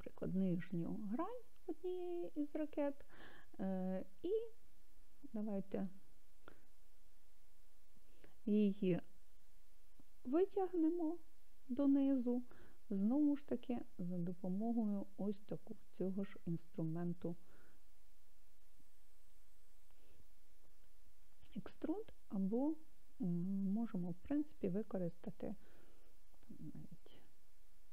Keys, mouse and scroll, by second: 0.5 click, 7.4 KP_1.